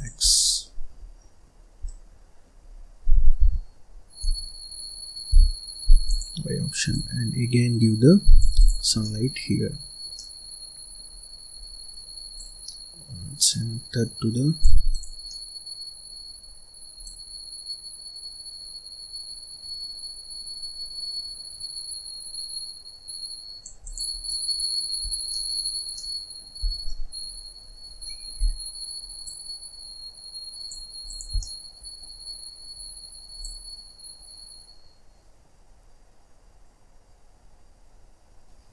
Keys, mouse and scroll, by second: 0.2 scroll down 2, 0.3 middle click, 1.1-2.7 middle drag, 2.7-3.3 scroll up 1, 3.3 g, 6.8 click, 8.5 click, 8.8 scroll up 1, 8.9 middle click, 9.6-9.9 scroll up 3, 10.1 middle click, 11.0-11.5 scroll down 2, 11.5-12.2 scroll up 1, 12.2 click, 14.8 click, 15.2 middle click, 16.0-16.9 scroll up 1, 16.9 click, 23.8 click, 24.1 scroll down 1, 24.2 middle click, 25.0 scroll down 1, 25.2 middle click, 25.7 scroll up 1, 25.8 scroll down 1, 25.9 middle click, 26.6 scroll down 1, 26.8 middle click, 27.2-27.8 scroll up 5, 27.8 scroll down 1, 28.0-29.2 middle drag, 29.2 click, 31.0 click, 31.3-32.5 middle drag, 32.5-33.3 scroll up 1, 33.3 click.